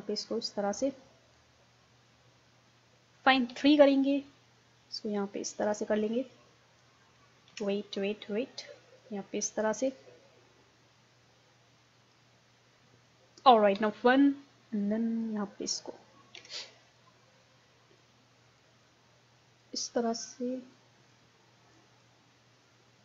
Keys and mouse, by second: 3.5 KP_3, 3.9-6.8 middle drag, 7.5 ctrl+z, 9.0-13.8 drag, 13.8 KP_1, 14.1 middle click, 14.8-23.0 drag, 16.4 ctrl+z.